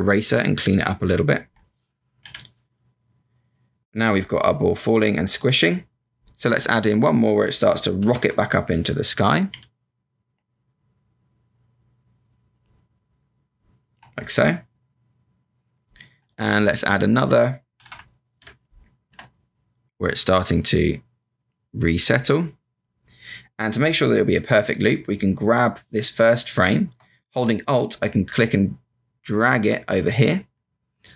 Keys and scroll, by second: 2.2 b, 7.9 F7, 8.1 F5, 9.5 b, 17.7 F7, 17.8 F5, 18.4 space.